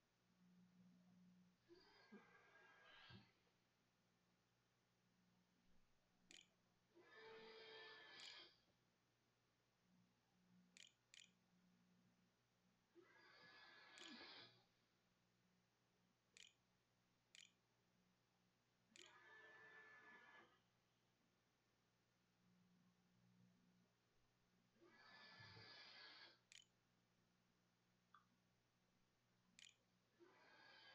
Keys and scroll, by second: 5.1-8.1 typing, 9.3-10.4 typing, 10.9 Delete, 11.7 ], 12.6 Up, 12.9 Down, 13.8 Right, 15.5 \, 16.2 Delete, 16.6 Return, 17.6 shift+Return, 17.7 shift+\, 18.0 shift+=, 18.7 shift+=, 20.5-21.7 typing, 25.3-26.6 typing, 27.9-29.2 typing, 30.4 ctrl+w.